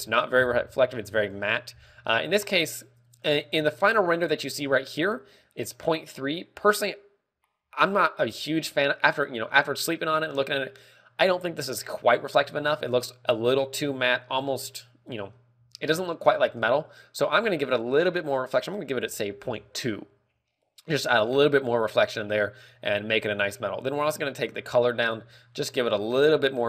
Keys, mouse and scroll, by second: 17.2 ctrl+click, 18.3 ctrl+click, 24.0 click.